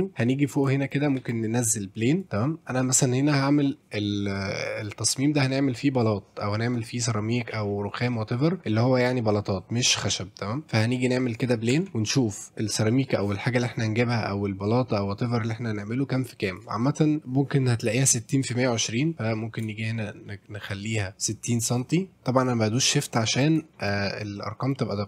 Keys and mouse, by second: 0.0 shift+middle drag, 0.3 middle drag, 0.8 shift+right click, 1.2 shift+a, 11.7 Tab, 12.7-16.6 drag, 17.9 click, 19.4-23.3 shift+drag, 23.7 shift+middle click, 24.0 middle click, 24.7 click.